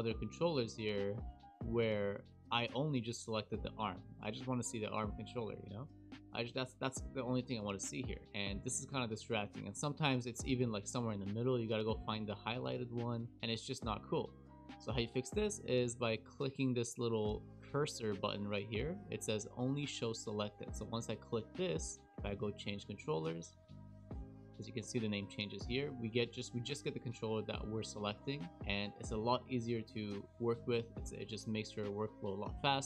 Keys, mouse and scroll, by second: 0.3-3.3 scroll up 27, 9.9-10.9 scroll down 5, 10.9 click, 11.1-11.7 scroll up 6, 11.7-12.2 scroll down 1, 12.2-12.8 scroll down 1, 12.8-13.3 scroll down 1, 13.5 click, 20.9 click, 22.6 click, 23.9 click, 26.4 click, 28.5 click, 29.5 click.